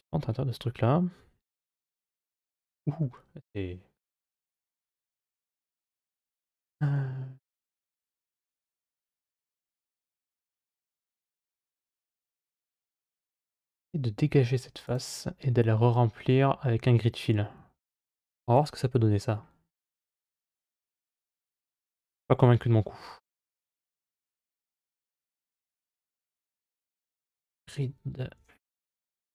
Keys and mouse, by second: 1.6 KP_Divide, 2.8 middle click, 4.2-6.0 middle drag, 6.7 shift+z, 8.8 middle click, 13.1 x, 22.1 middle click, 23.4 2, 24.0 right click, 25.9 space.